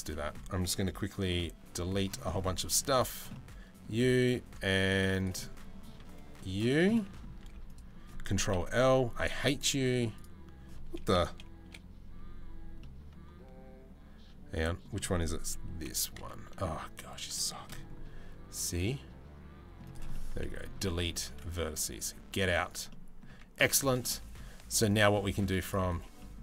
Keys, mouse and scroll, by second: 1.2 c, 2.9 middle click, 3.7 c, 5.0 middle click, 6.5 middle click, 6.5 c, 7.0 z, 8.1 ctrl+l, 9.5 z, 11.2 KP_7, 12.4-14.4 middle drag, 15.3 KP_7, 16.2 1, 17.1 shift+middle click, 18.0 c, 19.7 middle click, 20.4 Delete, 22.0 z, 22.5 middle click, 22.9 a, 23.4 middle click, 23.7 middle click, 24.1 z, 24.7 middle click, 25.2 click, 25.8 middle click, 26.1 a.